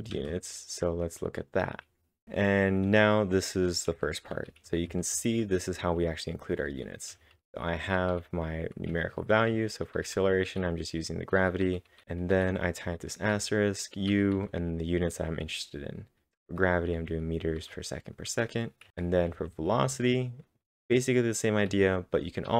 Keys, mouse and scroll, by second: 0.0-0.1 typing, 2.0-2.8 typing, 4.4-10.1 typing, 12.0-13.8 typing, 16.7-17.5 typing, 19.0-20.6 typing.